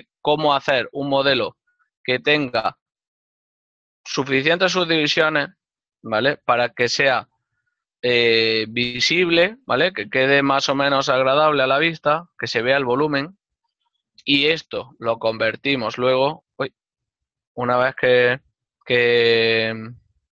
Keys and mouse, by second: 3.1 click, 4.7 middle click, 17.2 shift+middle click, 19.8 z.